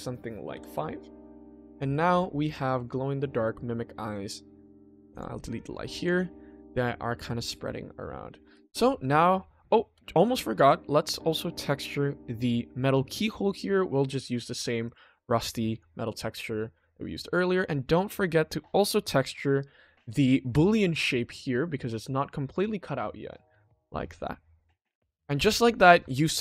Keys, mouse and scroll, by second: 1.6 middle drag, 1.9 scroll down 2, 2.4 click, 2.8-4.1 middle drag, 4.6 click, 4.9 x, 5.5 click, 5.9 click, 6.4 click, 7.9-8.4 middle drag, 8.5 ctrl+s, 9.6 shift+middle drag, 10.2-10.6 middle drag, 10.7-11.3 ctrl+middle drag, 11.6 click, 14.2-14.9 drag, 15.7 click, 16.2 click, 16.7 click, 17.2 middle click, 17.7-18.3 ctrl+middle drag, 21.3-23.5 drag, 24.0 middle drag, 24.2 scroll down 2, 24.8 click, 24.8 scroll down 1, 25.2-25.6 middle drag, 26.0 ctrl+s, 26.3 middle click.